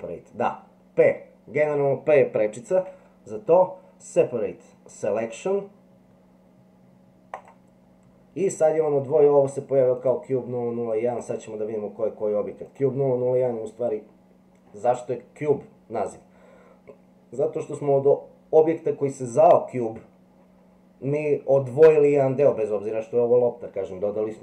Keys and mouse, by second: 9.9 click, 11.1 click, 12.6 click.